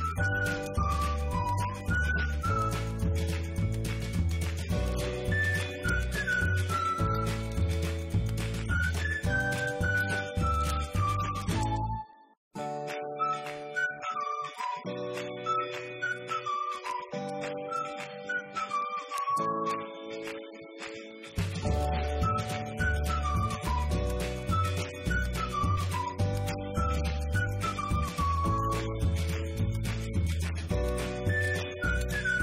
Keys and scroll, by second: 0.0 Up, 1.3 1, 2.0 0, 2.4 -, 6.6-12.1 typing, 12.5 Up, 15.3 Delete, 15.7 Right, 15.8 Left, 18.9-21.0 typing, 21.3 Return, 21.6 Up, 23.4 F2, 25.3 BackSpace, 25.8 2, 26.0 Return, 26.4 Up, 26.5 Right.